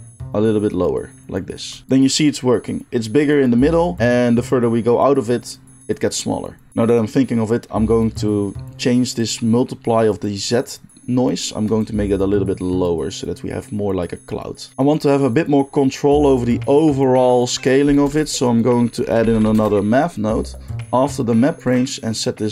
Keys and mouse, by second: 17.9 shift+a, 20.7 middle click, 21.6-22.5 drag.